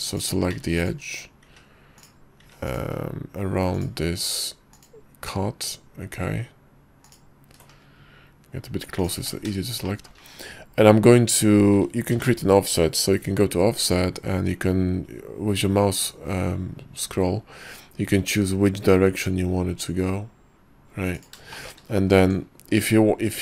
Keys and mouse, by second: 0.7 ctrl+z, 0.9 ctrl+click, 1.6 ctrl+z, 2.5 ctrl+z, 2.8 ctrl+click, 3.8 ctrl+click, 4.3 ctrl+z, 4.9-6.4 ctrl+drag, 6.4 ctrl+z, 7.1 ctrl+click, 9.1 ctrl+click, 10.0 shift+middle click, 12.2 y, 21.6 shift+click, 22.3 Tab.